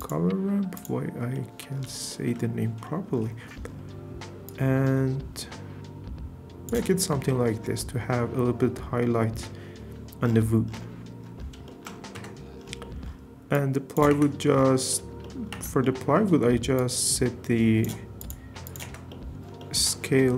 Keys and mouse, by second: 0.8 click, 0.9 typing, 1.3 click, 2.1 shift+drag, 2.8 click, 4.4-6.7 drag, 7.3 shift+drag, 12.1 Tab, 13.5 click, 14.1 Tab, 15.5 Tab, 18.2 click, 18.8 Tab.